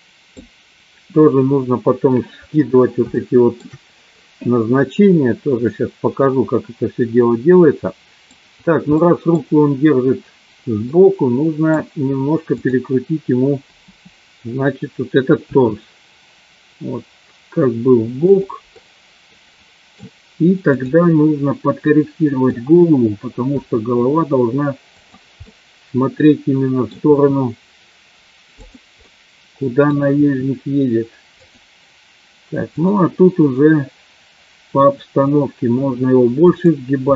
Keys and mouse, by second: 3.2 shift+middle click, 5.8-8.3 middle drag, 9.0 middle click, 11.0 middle click, 13.8 KP_7, 15.7 r, 18.7-19.9 middle drag, 21.9 middle click, 23.4 r, 25.5-26.9 middle drag, 27.3 r, 28.9 click, 29.1 middle click, 30.3 r, 32.7 click, 34.7 r, 36.8 click.